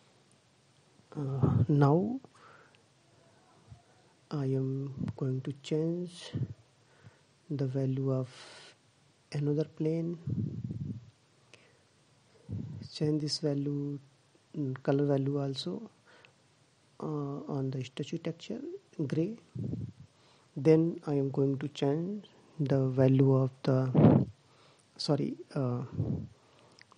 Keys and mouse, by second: 5.1-6.8 drag, 23.7-25.0 drag, 25.4-26.9 drag.